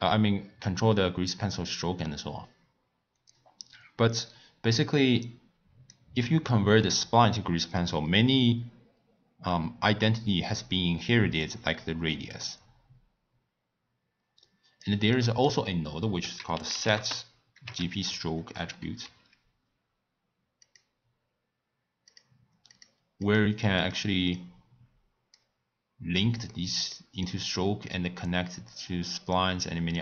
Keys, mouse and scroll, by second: 3.3-6.4 drag, 11.4-14.4 drag, 15.1-16.2 middle drag, 16.2 ctrl+a, 19.0 Down, 23.0 click, 23.6 click, 24.1 click, 24.3-26.5 drag, 26.5-27.2 middle drag, 27.2-30.0 drag.